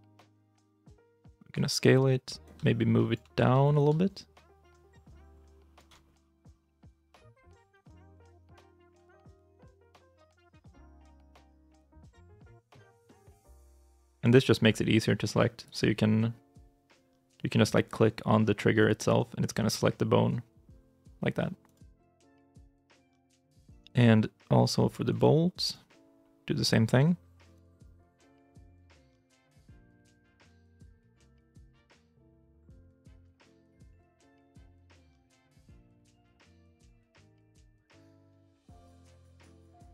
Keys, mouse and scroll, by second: 3.3 ctrl+z, 6.1 scroll up 1, 6.2 middle click, 6.6 shift+middle click, 6.9 shift+middle click, 10.6 middle click, 13.1 middle click, 14.2 right click, 17.7 right click, 19.3 r, 21.8 alt+r, 22.2 scroll down 1, 22.5 shift+middle click, 22.7 shift+scroll up 2, 22.9-23.5 scroll, 23.5 right click, 28.3 shift+i, 28.3 shift+middle click, 30.9 shift+middle click, 33.3 middle click, 35.8 scroll down 1, 36.0 middle click, 37.7 right click, 38.0 middle click, 38.1 scroll up 1, 38.4-38.8 scroll down 1, 39.2 right click, 39.6 g.